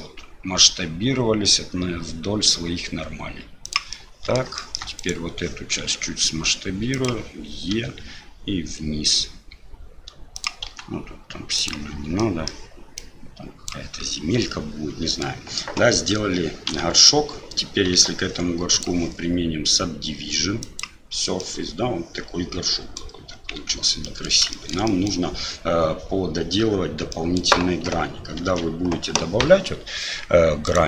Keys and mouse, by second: 3.9 middle click, 4.6 shift+middle click, 7.7 e, 10.7 s, 12.3 middle click, 13.1 click, 14.5 middle click, 16.7 KP_Divide, 17.9 Tab, 18.8-20.8 drag, 21.4-23.0 middle drag, 23.6 Tab, 24.0 middle click, 24.5 shift+middle click, 24.9 middle click, 27.1 middle click, 28.4 ctrl+r.